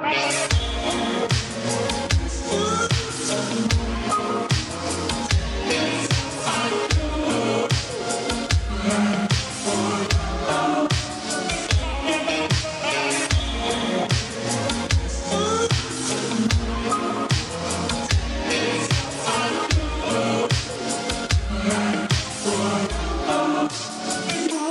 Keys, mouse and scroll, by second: 6.9-8.0 scroll down 1, 8.0 click, 21.7 right click, 24.0 click.